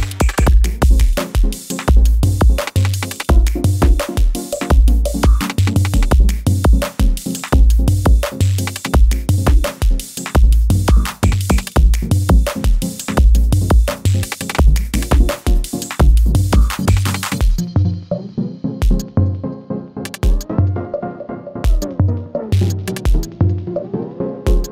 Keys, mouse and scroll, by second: 0.0 ctrl+alt+Home, 1.6-6.8 drag, 10.4-11.4 shift+drag, 12.8 ctrl+alt+Home, 14.6 click, 18.6-22.2 drag.